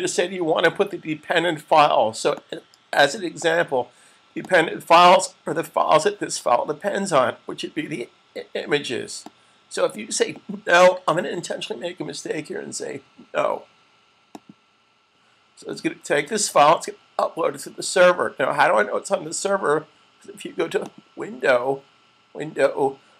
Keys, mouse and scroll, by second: 2.5 click, 9.0 click, 14.2 click, 20.6 click.